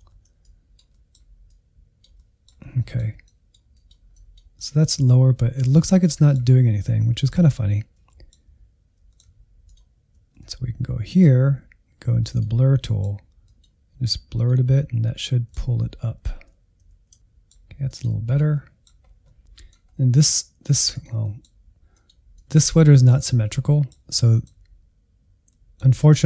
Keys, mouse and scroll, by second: 0.4 click, 0.8 middle click, 1.4 click, 2.1-3.2 middle drag, 3.2-4.6 drag, 4.6-6.5 middle drag, 6.5 scroll down 1, 6.8-9.9 middle drag, 9.9 ctrl+click, 10.2 middle click, 11.1 click, 11.4 middle click, 11.7 click, 12.3 middle click, 13.1 alt+z, 13.5 middle click, 13.7-14.3 scroll up 1, 14.3 click, 14.4 middle click, 14.9 click, 15.2 middle click, 15.5 scroll up 1, 15.5 middle click, 15.9 click, 16.1 shift+middle click, 16.7-17.9 drag, 17.9 scroll down 2, 18.1 middle click, 18.4 middle click, 18.9 scroll up 1, 19.0 shift+middle click, 19.9-20.2 scroll up 1, 20.9 click, 21.2 middle click, 21.9-23.4 drag, 23.4-26.2 middle drag.